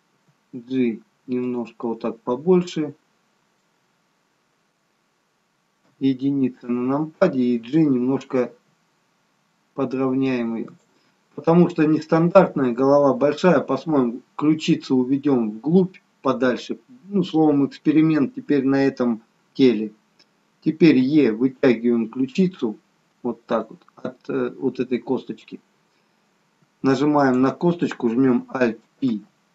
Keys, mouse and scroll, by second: 0.1 g, 1.8 middle click, 5.8 KP_1, 8.5 g, 21.1 e, 27.3 click, 29.1 alt+p.